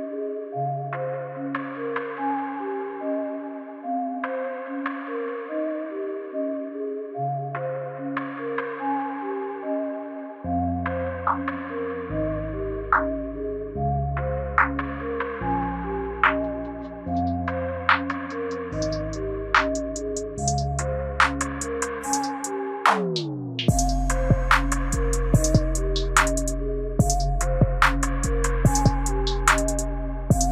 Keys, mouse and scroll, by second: 1.0-2.1 scroll up 4, 2.1 click, 11.0 Right, 11.4 Right, 11.8 Right, 12.2 Right, 14.5 click, 19.6 Right, 19.8 Right, 20.1 Right, 20.4 Right, 20.7 Right, 21.6 click, 27.2 Right, 27.5 Right, 27.7 Right, 28.0 Right, 29.3 click.